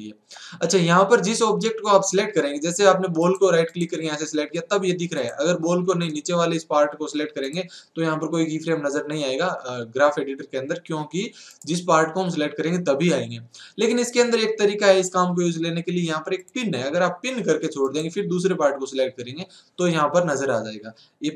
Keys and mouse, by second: 3.2-8.1 right drag, 6.1 click, 7.0 middle click, 7.4 click, 11.5-16.2 right drag, 16.2-17.4 drag, 20.4 click, 20.4 right click.